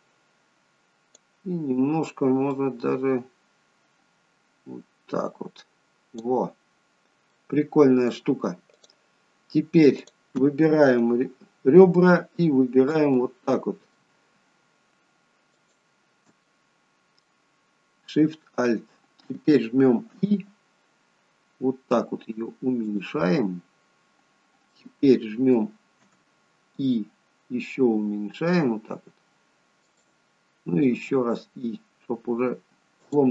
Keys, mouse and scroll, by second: 2.6 click, 6.9-8.6 scroll down 2, 7.4 middle click, 8.8 click, 9.5-10.1 scroll up 1, 10.1 click, 13.2 middle click, 15.6 alt+shift+click, 16.5 middle click, 23.7 middle click.